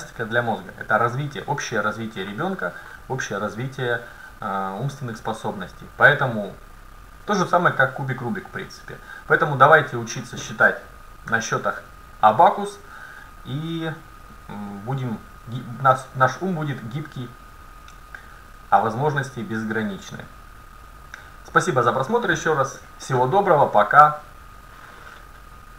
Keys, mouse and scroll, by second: 11.3 a.